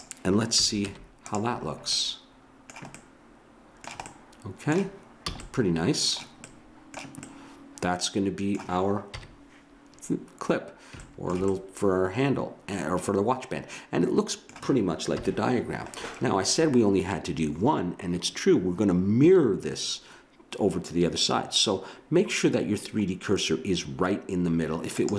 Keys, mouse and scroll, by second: 0.5 a, 0.9 Tab, 5.3 a, 9.1 KP_1, 11.6 middle click, 12.2-13.4 middle drag, 15.2 KP_1, 25.0-25.1 right drag.